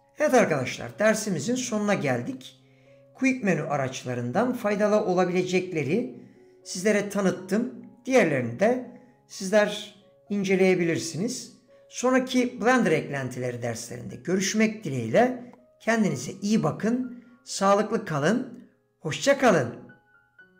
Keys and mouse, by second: 3.1 d.